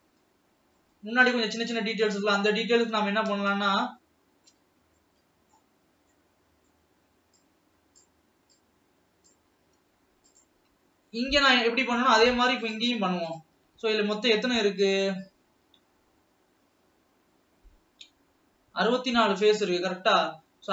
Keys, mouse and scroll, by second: 0.0 alt+a, 1.2-2.7 middle drag, 2.7 scroll up 1, 3.5 scroll up 1, 4.0-5.1 middle drag, 5.1 scroll down 1, 5.3-6.2 shift+middle drag, 6.2 shift+scroll down 1, 6.5-7.7 shift+middle drag, 7.7 shift+click, 8.9-10.0 drag, 10.0 scroll up 2, 10.5 click, 11.3 Tab, 11.5 scroll up 1, 14.0 click, 14.5 alt+a, 15.2 alt+click.